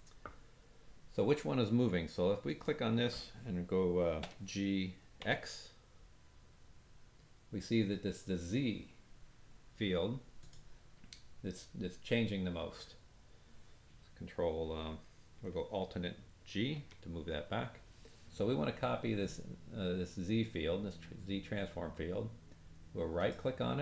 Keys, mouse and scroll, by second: 2.4 click, 4.4 g, 16.7 alt+g, 23.1 right click.